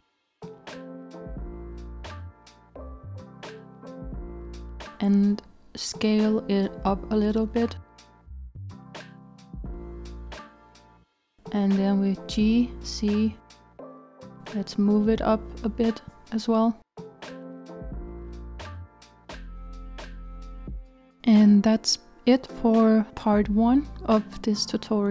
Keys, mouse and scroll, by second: 2.9 click, 4.9 s, 11.5 g, 15.4 z, 15.4 z, 15.5 z, 16.7 g, 18.5 z, 18.6 z, 18.6 z, 19.2 click.